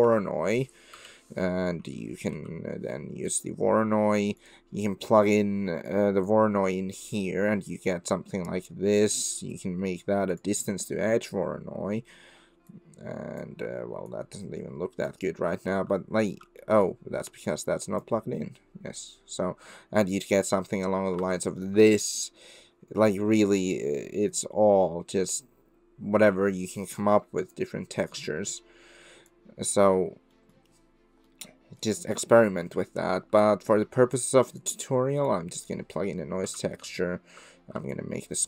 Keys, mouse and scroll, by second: 5.0 click, 5.9 click, 8.3 middle drag, 9.5-10.4 drag, 12.7 click, 14.1 click, 15.6 click, 16.2 ctrl+z, 16.7 click, 17.4-18.1 drag, 21.2 shift+click, 22.3 middle click, 22.3 scroll up 1, 23.2 middle click, 23.3 click, 23.3 middle click, 24.3-27.6 drag, 27.6 right click, 28.3-29.3 right drag, 29.8 middle click, 30.4 middle drag, 31.3 middle click, 33.4 click, 34.6 click, 35.3 click, 36.4 x, 36.8 middle click, 37.9 middle click, 38.1 click.